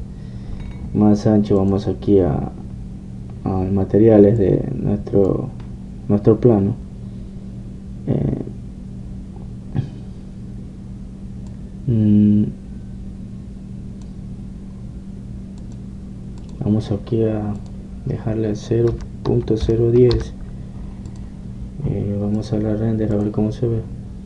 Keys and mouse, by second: 2.7-5.5 drag, 5.5-8.1 middle drag, 12.6-14.5 drag, 15.8 middle click, 16.7-20.2 drag, 23.5 click.